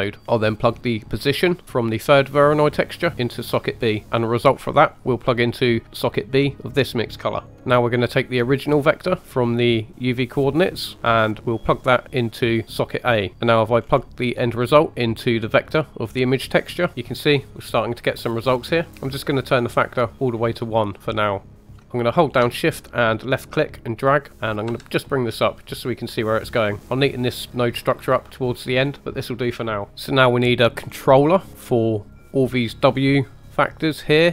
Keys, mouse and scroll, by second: 0.2 middle click, 0.2 scroll up 2, 1.5 click, 3.7 middle click, 4.0 click, 4.0 right click, 4.9-5.2 drag, 7.5 middle click, 7.7-9.2 scroll up 2, 9.2 middle click, 10.4 middle click, 10.9 right click, 11.4 click, 13.3 middle click, 13.3 right click, 13.7-14.0 scroll up 3, 14.2 middle click, 14.9 middle click, 16.0-16.8 drag, 16.9-18.5 drag, 18.9 scroll down 2, 19.6 click, 21.4 click, 21.5 middle click, 21.7 scroll down 3, 21.8 shift+middle click, 21.9 shift+right click, 23.3 shift+right click, 24.6 g, 26.8 click, 28.8 scroll down 1, 30.8-31.2 scroll up 2, 31.2 middle click, 32.1 click, 33.8 click.